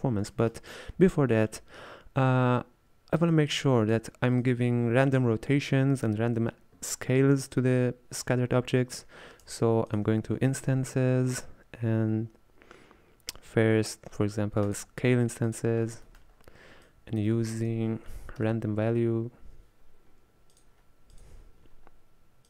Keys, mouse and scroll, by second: 0.9-1.4 scroll down 2, 1.4-3.6 middle drag, 3.6 click, 4.5 click, 7.7-9.5 middle drag, 9.5 space, 10.2 shift+a, 15.9-16.7 scroll up 5, 16.2 middle click, 16.9 click, 17.6 space.